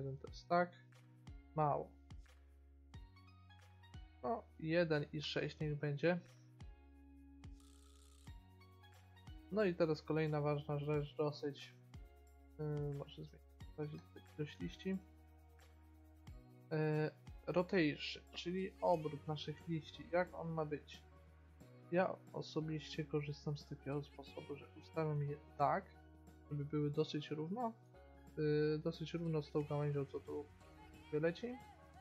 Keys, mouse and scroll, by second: 0.0 middle click, 1.9-7.0 drag, 11.5 middle click, 13.0-15.9 drag, 14.8-15.9 middle drag, 18.7-20.6 drag, 20.8-25.0 drag, 25.0 middle click, 25.5 click, 29.3 middle click, 30.5 middle click, 30.7 middle click.